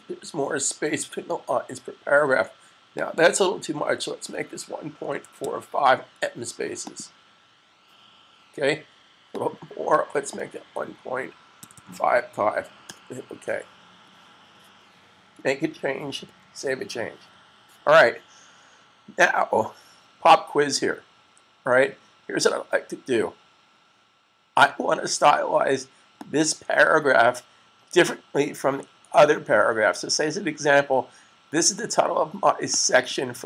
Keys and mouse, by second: 2.8 click, 5.1-5.8 typing, 6.7 click, 8.6-11.4 typing, 14.8-15.2 typing, 25.9 click, 32.8 click.